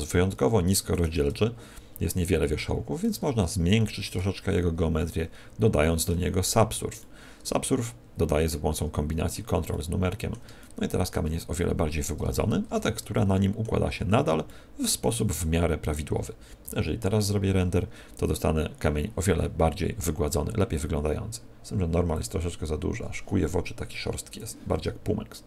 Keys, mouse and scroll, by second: 1.5 scroll up 2, 2.1 scroll up 4, 10.6 middle click, 12.2 Tab, 13.8-14.1 scroll up 6, 14.4 middle click, 15.2 Tab.